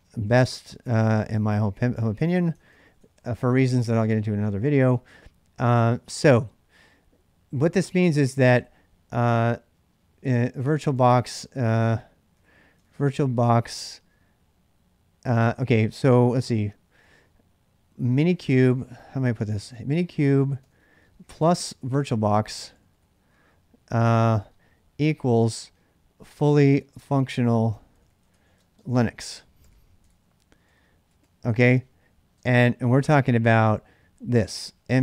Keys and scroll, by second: 0.0-3.9 typing, 12.5-13.3 typing, 15.4 typing, 20.5-35.0 typing.